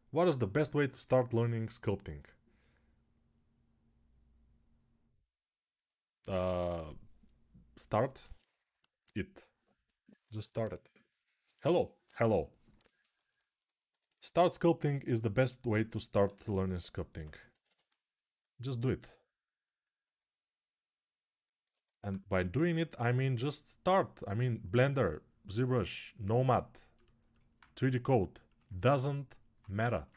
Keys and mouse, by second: 16.7 [, 21.4-28.4 alt+drag.